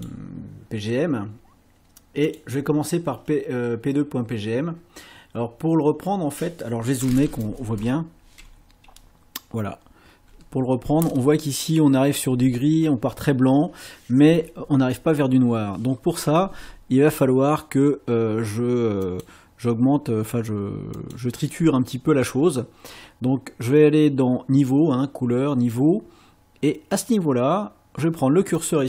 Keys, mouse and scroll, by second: 2.3 click, 7.8-8.7 ctrl+scroll up 4, 9.8 scroll down 2, 19.0 click, 21.0 click, 28.6-28.8 drag.